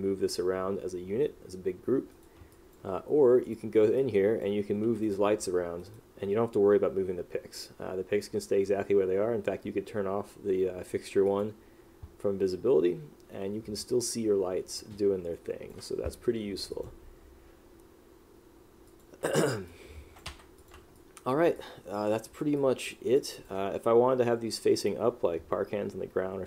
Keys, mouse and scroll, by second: 2.3 right click, 2.7 click, 4.1 click, 5.1 click, 5.9 right click, 14.9 click, 19.8 click, 21.1 click, 21.7 click, 22.7 click, 23.3 click.